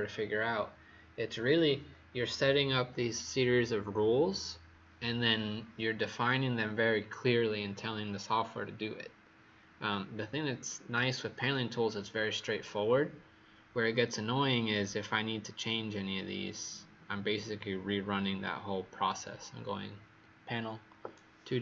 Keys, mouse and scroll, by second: 14.4-16.4 scroll down 1, 16.4-18.1 scroll up 1, 18.2-21.6 scroll down 1.